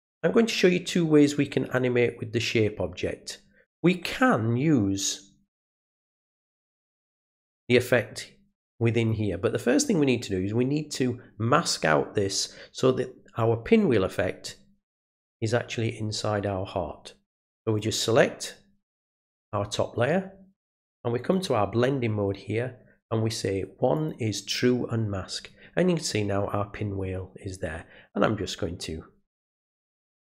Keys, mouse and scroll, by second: 17.6 click, 21.3 click, 23.9 click, 30.2-30.3 drag.